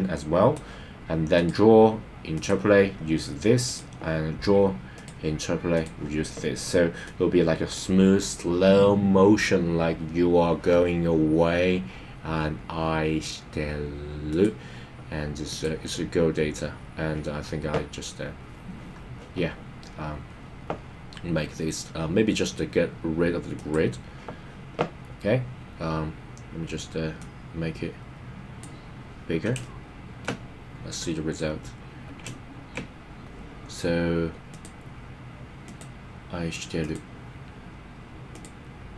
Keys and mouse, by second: 1.3-2.5 drag, 3.6 click, 5.0 click, 7.0 click, 14.3-15.6 drag, 23.5 click, 27.2-28.8 drag, 29.6 shift+middle click, 34.5 click, 35.7 click, 36.8 click, 38.4-38.9 drag.